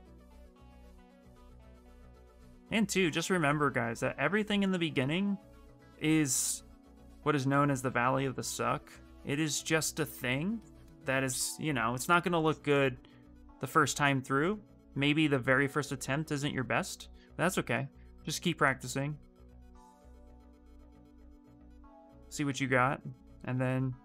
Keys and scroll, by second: 21.1 s.